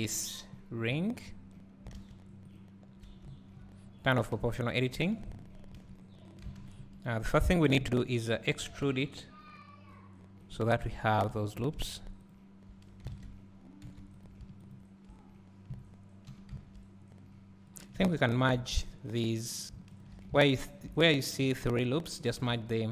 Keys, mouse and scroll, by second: 1.0 `, 2.0 alt+a, 2.6 alt+click, 3.3 `, 4.4 o, 5.7 KP_3, 6.6 ctrl+KP_3, 6.9 ctrl+KP_Decimal, 7.3 ctrl+KP_1, 8.8 e, 10.9 1, 11.7 click, 13.1 alt+a, 13.9 w, 14.3 click.